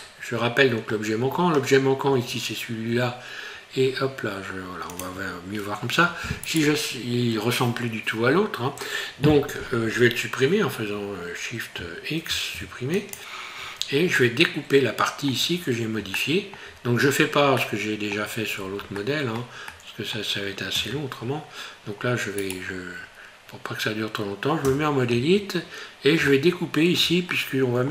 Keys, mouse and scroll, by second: 0.0 middle click, 1.3 scroll up 2, 2.5 scroll up 1, 5.0 click, 6.4 right click, 12.3 shift+x, 13.5-13.9 scroll down 3, 14.1 middle click, 16.2 shift+middle click, 17.6 middle click, 18.6 scroll up 2, 19.0 shift+middle click, 20.0 middle click, 20.2 shift+middle click, 20.7 Tab, 21.2 scroll up 3, 21.9 scroll down 3, 22.4 right click, 23.0 scroll up 2, 24.6 Tab, 26.3 shift+middle click, 27.3 middle click.